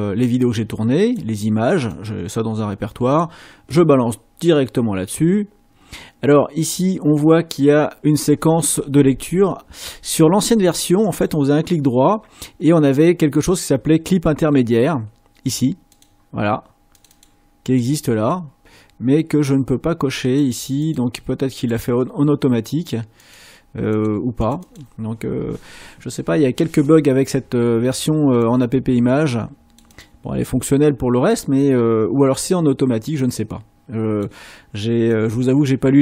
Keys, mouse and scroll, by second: 0.2 click, 1.2 click, 1.9-3.4 drag, 11.1 middle click, 15.9 click, 16.9 click, 17.6-18.1 drag, 20.2 click, 21.7 middle click, 23.1 click, 23.9 click.